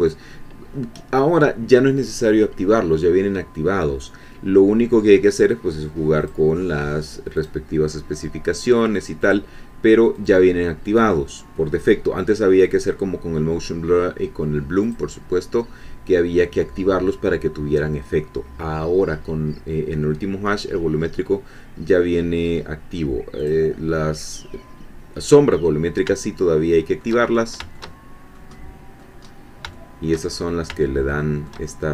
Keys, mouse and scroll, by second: 6.2 click, 7.4 click, 9.2 click, 10.1 click, 14.9 click, 23.4 click, 26.2-27.3 shift+middle drag, 27.3 shift+scroll down 1, 27.7-29.2 shift+drag, 29.2-29.6 scroll up 1, 29.7 shift+click, 30.8 shift+middle click, 31.7 shift+middle click, 31.8 shift+scroll down 1.